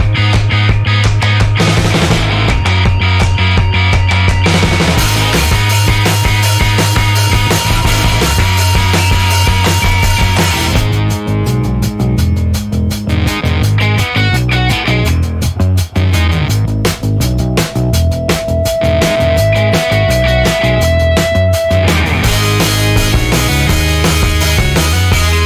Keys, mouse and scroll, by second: 1.5 click, 2.1 click, 3.2-4.3 drag, 4.7 click, 5.3 click, 7.7 click, 9.2 F2, 9.7 click, 10.2 click, 10.6 F2, 12.0 shift+v, 13.1-14.7 typing, 15.9 ., 17.2 BackSpace, 17.9 space, 18.3 shift+m, 18.9 shift+a, 22.2 BackSpace, 24.0-25.4 typing.